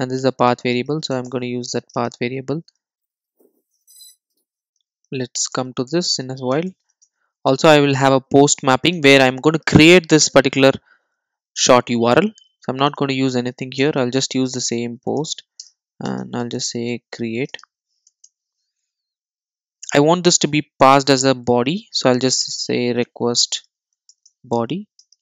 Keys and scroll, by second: 0.2 Return, 3.5 super+z, 4.9 Return, 7.6 Return, 13.8 Return, 24.5 Return.